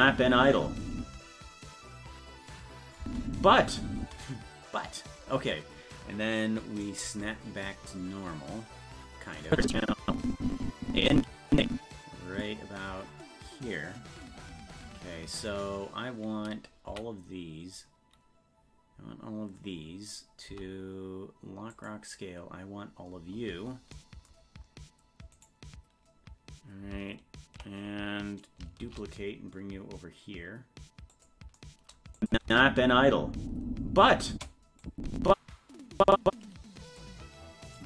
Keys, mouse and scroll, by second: 1.0 space, 7.4-7.7 scroll down 1, 8.1 scroll down 10, 9.0-9.5 scroll down 4, 9.5-12.4 drag, 20.5 i, 23.3 scroll up 1, 23.9-25.3 scroll up 10, 25.3-26.9 right drag, 28.8 shift+d, 32.2 click, 32.4 space, 34.8-37.0 drag, 37.6 right click.